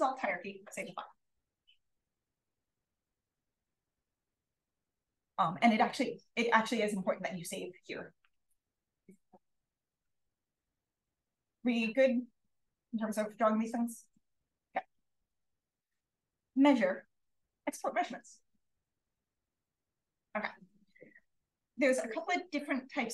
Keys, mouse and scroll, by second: 5.1-10.3 drag, 21.8 click.